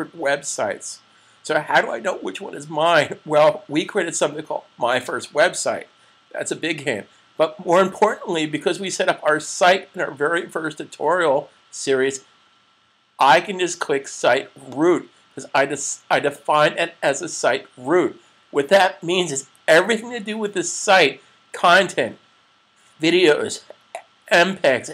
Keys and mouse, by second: 14.5 click.